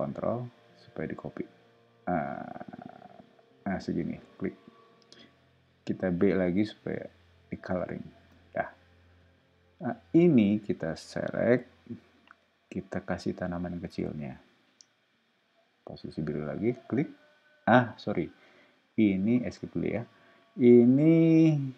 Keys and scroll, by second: 6.1 b, 8.1 space, 12.2 q, 14.2 Up, 18.4 Left, 19.4 ⟲, 20.9 Up, 21.5 Right.